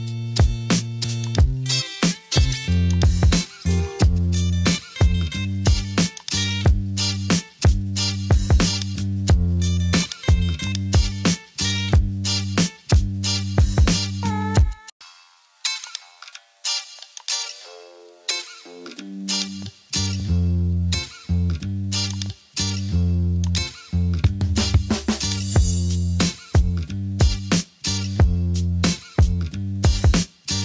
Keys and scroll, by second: 20.7 super+t, 30.0 Return.